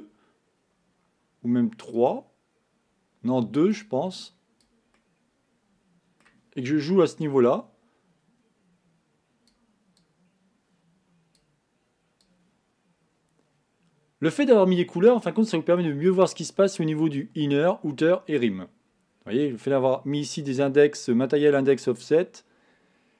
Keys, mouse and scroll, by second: 1.9-2.9 drag, 3.8 click, 4.3 click, 5.0-7.3 middle drag, 7.3-15.1 drag, 15.1-16.2 middle drag, 16.2-17.5 scroll up 2.